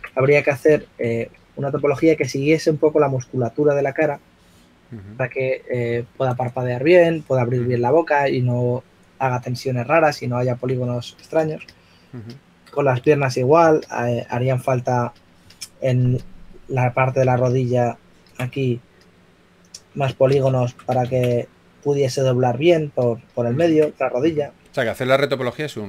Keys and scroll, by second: 0.9 typing, 1.9 x, 22.0 super+z, 25.4-25.8 typing.